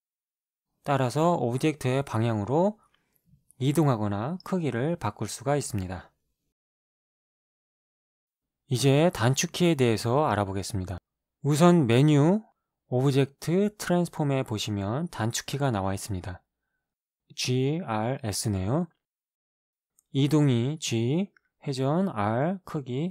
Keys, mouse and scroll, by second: 2.1 click, 4.3-6.7 drag, 8.8-10.6 right drag, 11.4 click, 20.2 g, 21.7 r.